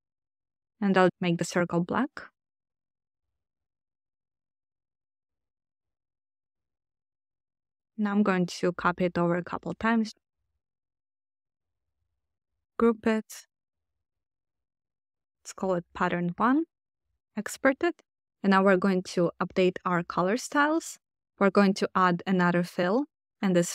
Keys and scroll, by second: 12.6 super+g, 12.9 super+r, 13.8-15.7 typing.